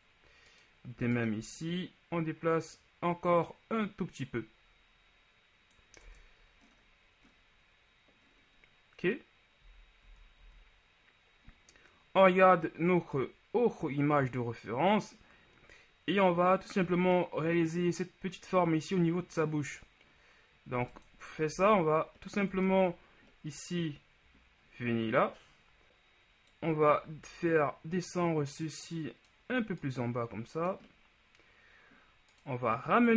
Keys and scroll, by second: 6.2 Tab, 9.9 z, 10.1 z, 21.7 z.